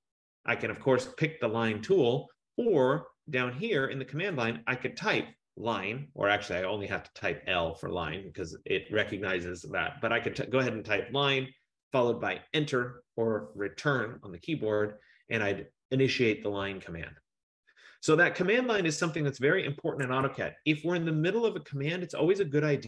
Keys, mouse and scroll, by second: 4.7 click, 5.7 i, 9.9-11.3 typing, 14.1 Return, 20.3 Escape, 21.5 F15.